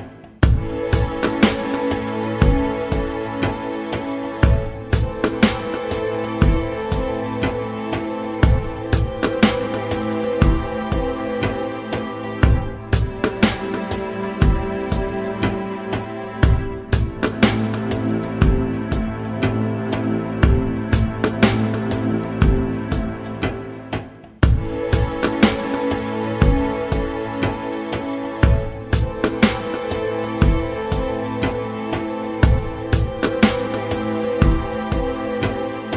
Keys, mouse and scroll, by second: 0.0-1.1 typing, 2.2 shift+e, 2.4 shift+t, 3.4 c, 4.3 shift+l, 5.4 o, 5.7 Tab, 7.2 c, 7.6 Tab, 8.4 BackSpace, 8.7 s, 10.3 shift+Tab, 10.8 Tab, 11.2 BackSpace, 12.4 Tab, 13.8 e, 15.4 shift+e, 15.6 shift+Tab, 17.5 BackSpace, 17.8 g, 18.1 Tab, 18.5 Return, 22.2 ctrl+c, 23.5 Up, 25.5 ctrl+x, 26.2 Up, 30.1 Return, 33.4 y.